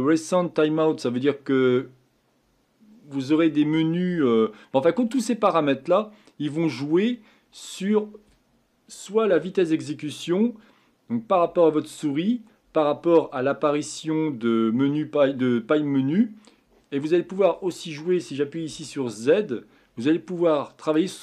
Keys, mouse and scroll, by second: 18.7 z.